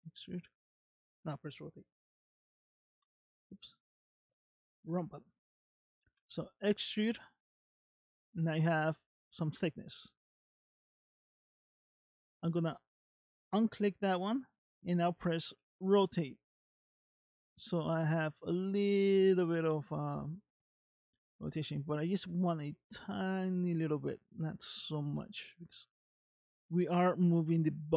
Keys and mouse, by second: 2.9 KP_7, 6.2 e, 15.6 r.